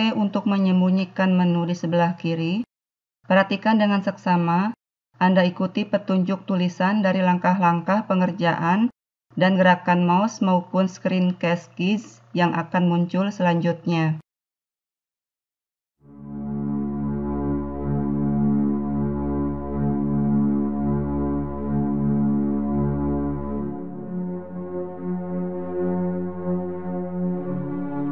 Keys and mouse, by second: 18.1 a, 21.1 click, 22.4-23.5 middle drag, 23.5-25.9 right drag, 25.9-26.9 drag, 26.9-28.1 middle drag.